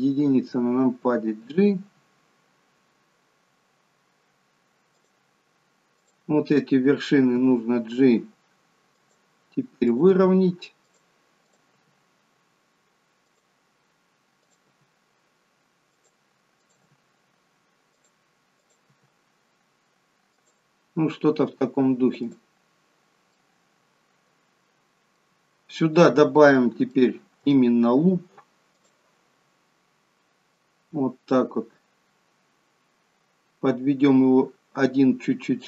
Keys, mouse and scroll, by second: 1.8 g, 6.0 click, 7.4 g, 9.9 click, 10.1 g, 11.5 click, 11.8 g, 14.5 click, 14.7 g, 16.7 click, 16.9 g, 18.7 click, 18.9 g, 21.3 scroll down 2, 22.3 click, 23.4 middle click, 27.0 shift+middle click, 28.8 click, 30.7 click.